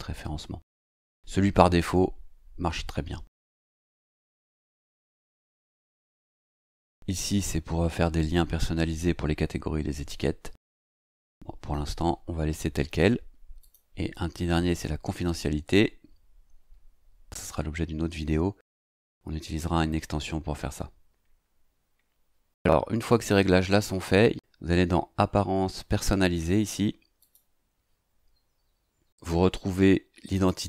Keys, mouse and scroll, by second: 4.0-13.6 scroll down 2, 13.6 click, 27.2 click, 30.3 click.